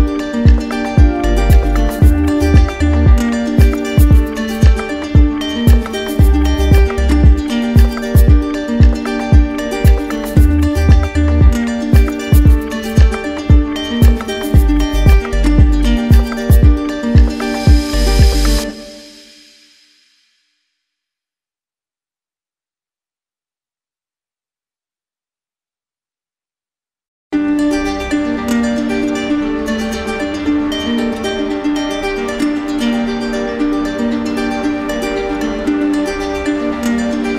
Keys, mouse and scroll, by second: 0.6 click, 2.2 click, 3.2 click, 4.3 click, 5.2 click, 7.1 click, 7.7 shift+click, 8.3 alt+click, 9.5 click, 10.0 alt+click, 12.6 alt+click, 13.1 click, 13.6 alt+click, 14.6 click, 15.1 alt+click, 18.1 alt+click, 18.5 click, 19.9 z, 23.2-24.3 drag, 25.8 click, 30.3 alt+click, 30.6 ctrl+w, 31.9 alt+click, 32.7 click, 33.2 click, 36.7 right click.